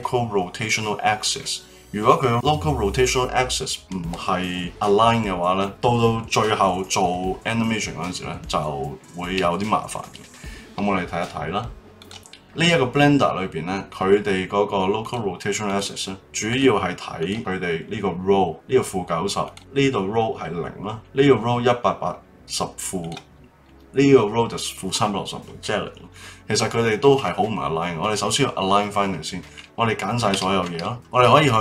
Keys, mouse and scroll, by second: 12.0 click, 12.3 middle click, 15.0 click, 15.6 click, 16.4 click, 17.2 click, 19.4 click, 20.9 click, 23.0 click, 26.1-29.1 middle drag, 30.3 a.